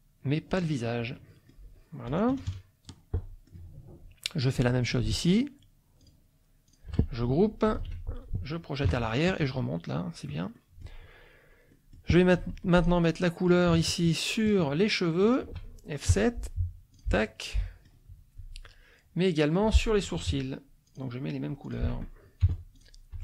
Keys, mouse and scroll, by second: 0.6 click, 1.1 middle click, 2.3 KP_Subtract, 3.2 middle click, 4.5 click, 5.3 shift+click, 6.0 shift+click, 6.7 shift+click, 7.7 ctrl+g, 8.9 End, 9.3 Page_Up, 10.5 click, 11.7 middle click, 12.4 F2, 12.8 click, 13.2 middle click, 14.4 shift+click, 15.2 shift+click, 16.1 F7, 16.9 click, 17.4 click, 18.4 F1, 19.6 F2, 20.9 shift+click, 21.7 shift+click, 22.4 F7, 22.8 click, 23.1 F1.